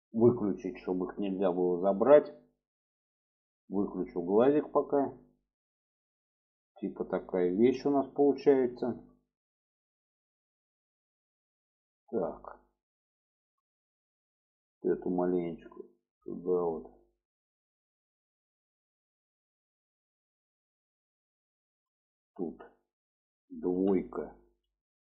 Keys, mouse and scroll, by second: 3.5 click, 4.0-7.0 middle drag, 7.9 shift+middle click, 8.8 shift+middle click, 9.9-13.0 middle drag, 13.3 shift+middle click, 14.2 shift+middle click, 15.1 click, 15.5-16.5 drag, 17.9-18.9 drag, 19.4 click, 20.2 shift+middle click, 20.9 shift+middle click, 23.7 2, 24.0 middle click.